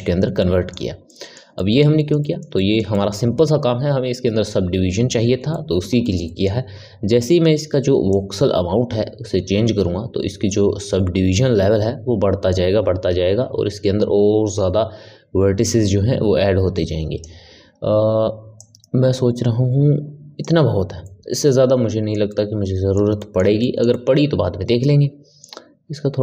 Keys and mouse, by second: 0.3-8.0 middle drag, 8.0-21.0 drag, 21.0-26.2 middle drag.